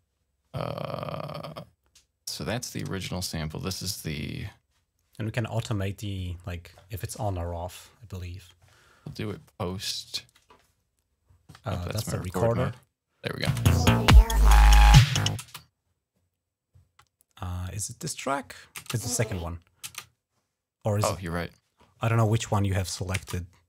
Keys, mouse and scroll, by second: 4.6-6.4 drag, 10.1 click, 12.1 click, 13.5 space, 15.3 space, 15.8 click, 17.4 click, 18.6 space, 19.7 space, 21.1-22.7 drag, 23.0 space, 23.1 click.